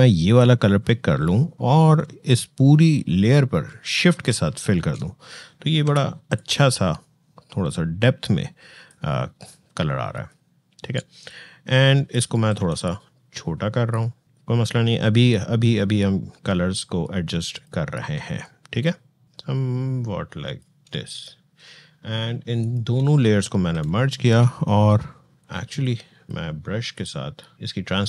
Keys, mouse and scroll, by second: 4.0 alt+shift+BackSpace, 5.6 v, 6.1 click, 6.2-10.0 drag, 10.0-10.7 alt+scroll down 1, 11.0 click, 12.3 ctrl+t, 13.7-18.2 drag, 18.2-22.4 alt+drag, 23.5 e, 25.2 alt+click.